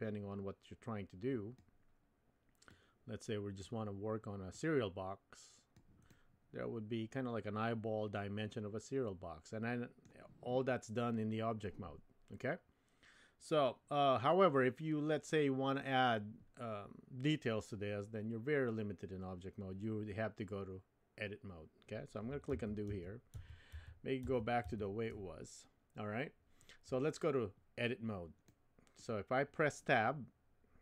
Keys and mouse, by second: 2.7 click, 4.6-5.7 drag, 6.0-10.1 middle drag, 22.5 super+z, 22.9 super+z, 23.3 super+z, 23.7 super+z, 24.2 super+z, 24.6 super+z, 27.7-29.8 middle drag.